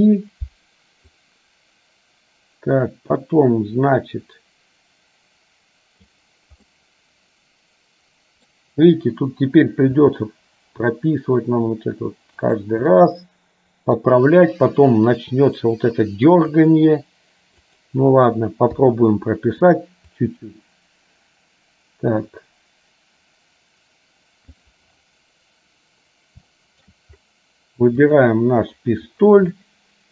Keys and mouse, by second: 1.3-6.2 drag, 6.8-8.6 middle drag, 10.1 g, 13.1-14.1 middle drag, 16.6 r, 18.8 i, 20.3-24.7 drag, 26.7 shift+middle click, 28.1 click, 29.6-30.1 middle drag.